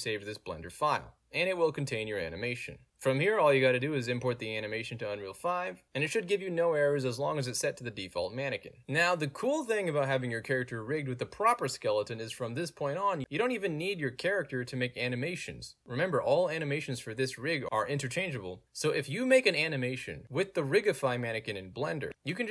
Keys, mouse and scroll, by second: 2.5 click, 3.3 right click, 3.8 ctrl+space, 4.7 click, 5.1 click, 5.2 click, 6.0 click, 6.4 middle click, 6.4-7.0 scroll down 5, 6.6 middle click, 7.0 middle click, 7.0 scroll up 2, 7.5 click, 8.3 click, 13.4 click, 13.5 click, 15.7 w, 19.7 click, 20.3-22.1 drag.